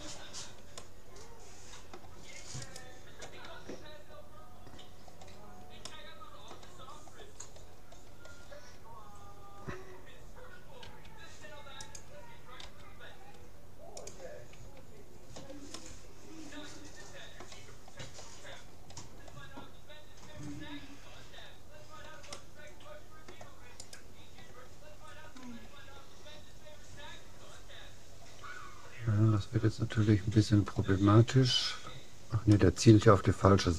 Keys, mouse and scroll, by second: 2.7-4.3 right drag, 4.3 right click, 4.5 middle click, 5.9-7.7 middle drag, 10.8 s, 12.7 g, 14.7 a, 15.0-16.9 middle drag, 17.9-18.9 middle drag, 20.4 middle click, 22.3-23.5 middle drag, 23.9-25.5 right drag, 25.5-28.5 middle drag, 31.0 middle click, 32.5-33.7 middle drag.